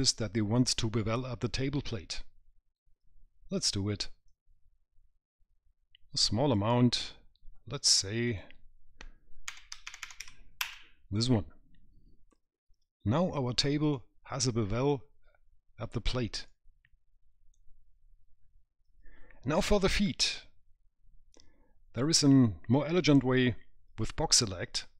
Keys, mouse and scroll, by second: 4.5 click, 8.5 click, 10.3 KP_0, 12.9-13.4 scroll up 1, 13.6 middle click, 14.2 right click, 16.7 right click.